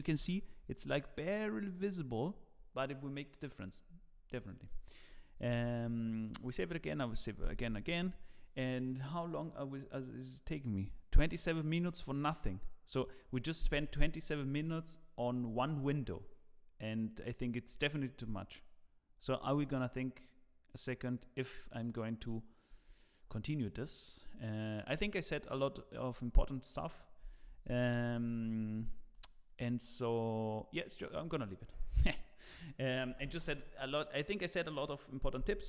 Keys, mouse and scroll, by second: 0.0 scroll down 1, 0.1 KP_0, 0.8 scroll up 5, 2.5-3.2 scroll down 2, 4.0 scroll down 2, 4.4 shift+middle click, 5.5 ctrl+s, 5.8 scroll down 1, 6.0 shift+middle click, 28.1 click, 29.2 shift+middle click.